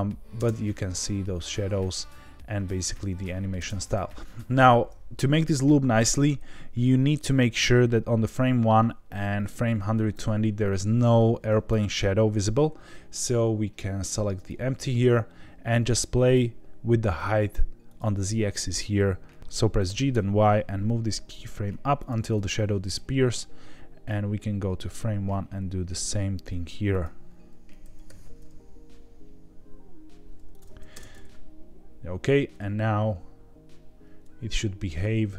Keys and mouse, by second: 0.3 space, 3.6 space, 7.1-10.1 drag, 14.3 click, 16.2 click, 17.0 click, 17.8 click, 19.4 Escape, 19.8 g, 20.1 y, 21.9 click, 24.0 click, 26.9 click, 27.8 g, 28.0 y, 30.5 click, 30.9 space.